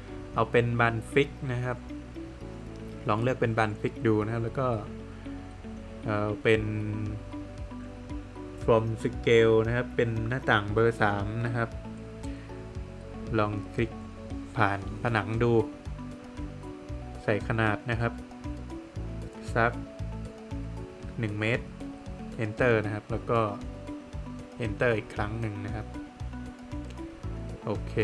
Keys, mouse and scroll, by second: 5.6 click, 8.0 click, 11.5 click, 12.8 click, 15.2 Return, 22.0 Return, 26.8 Escape.